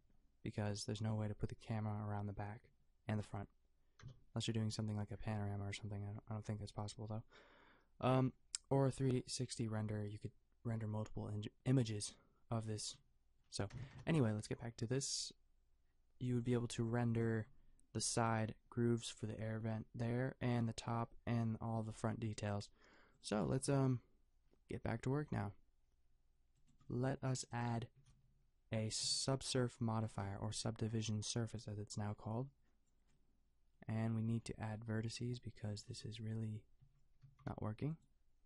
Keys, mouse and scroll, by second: 4.0 KP_0, 13.9 KP_0, 16.4-20.1 drag, 16.9 g, 17.3 a, 23.2-26.7 drag, 23.5 a, 26.9-30.1 drag, 30.1 ctrl+3, 35.9 Tab, 36.8 a, 37.2 a, 37.6 g.